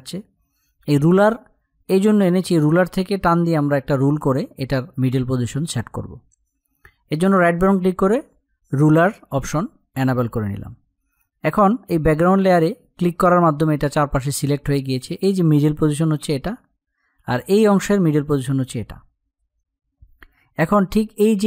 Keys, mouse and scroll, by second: 12.0 click.